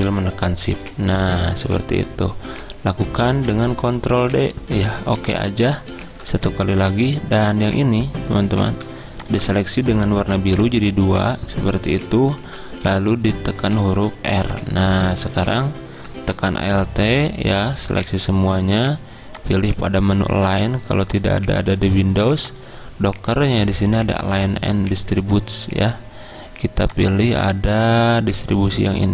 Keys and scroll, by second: 3.9 ctrl+d, 5.9 ctrl+d, 12.5 ctrl+z, 13.9 r.